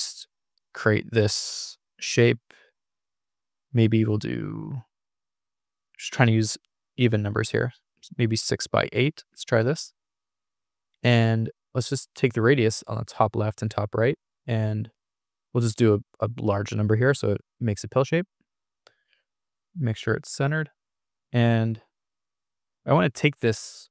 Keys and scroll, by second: 14.9-16.6 typing.